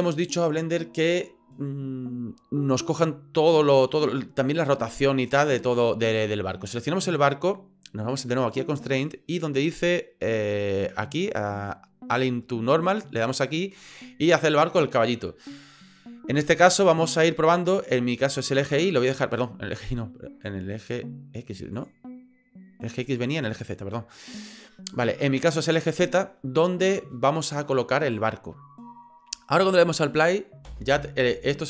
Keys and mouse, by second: 6.7 right click, 8.5 click, 13.2 click, 16.8-18.7 drag, 19.8-21.8 drag, 23.1-24.4 drag, 29.9 click, 30.7 space.